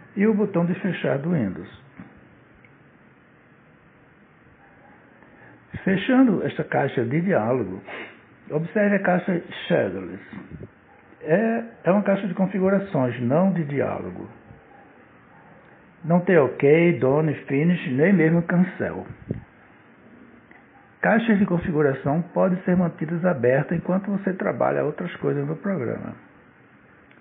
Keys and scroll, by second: 22.5 Escape.